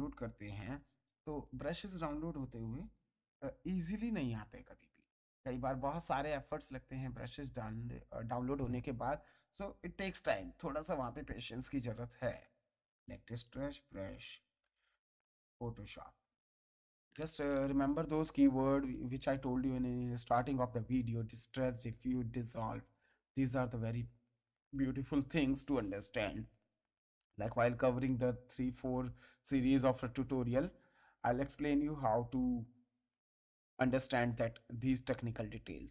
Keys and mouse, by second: 2.1-4.7 typing, 5.7 BackSpace, 6.2 s, 7.1 space, 13.0-16.8 typing, 18.9 click, 23.4 click.